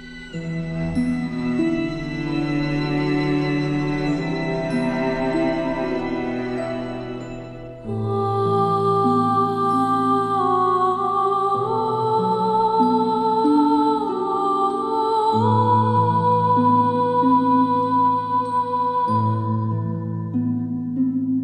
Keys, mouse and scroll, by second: 1.8-2.7 alt+shift+drag, 13.0 ctrl+2, 13.4-14.2 drag, 14.4 space, 15.0 alt+scroll down 1, 17.3-18.4 drag, 18.6 space, 18.7 click, 19.0 space, 19.1 click, 19.5 alt+scroll up 1, 20.0 click.